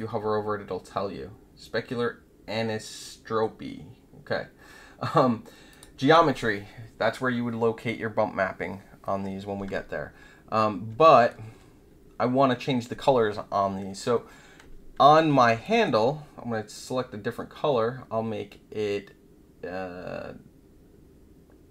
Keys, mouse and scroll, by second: 5.7 click, 11.0 alt+middle click, 15.6 alt+middle click, 16.7 click.